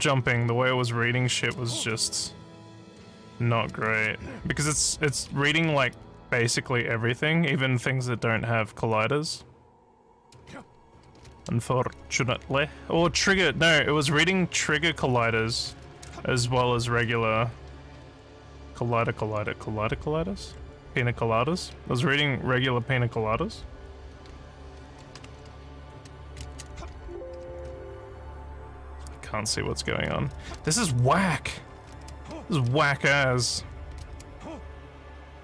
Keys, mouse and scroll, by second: 0.0-2.7 typing, 3.7-6.3 typing, 8.0 w, 10.0-19.0 typing, 20.4-22.3 typing, 23.4-26.3 typing, 26.4 ctrl+space, 26.8 ctrl+s, 27.1 ctrl+w, 27.2 ctrl+a, 28.2-32.8 typing, 33.9 d, 34.1 space, 34.5 w.